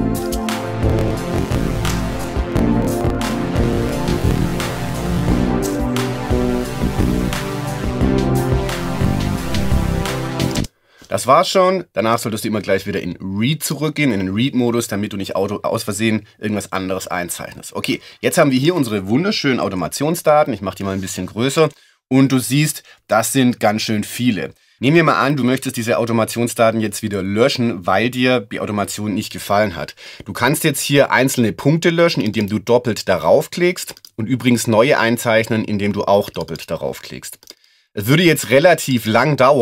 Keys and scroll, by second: 10.5 space.